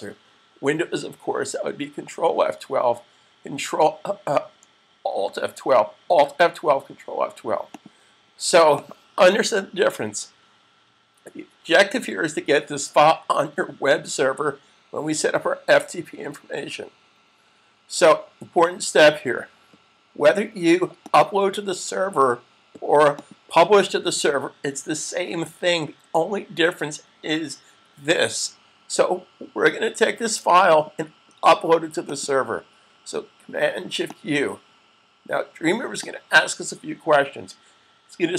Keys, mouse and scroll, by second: 7.5 click, 20.8 click, 30.5 click.